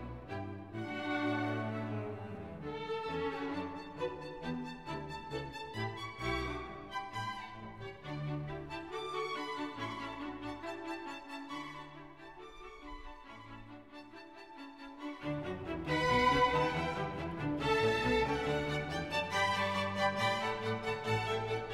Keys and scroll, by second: 5.9 F1, 8.8 Escape, 12.7 F1, 14.7 Escape.